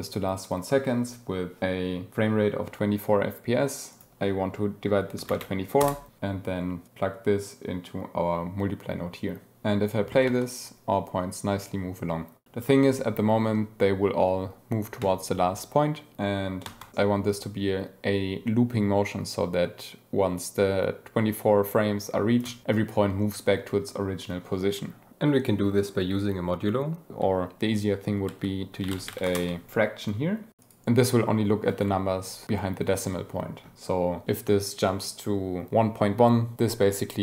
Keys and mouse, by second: 3.8-5.8 drag, 6.8-9.5 drag, 9.5 ctrl+x, 9.5 g, 10.2 space, 16.6 space, 28.2 shift+a, 30.1 click, 30.5 click.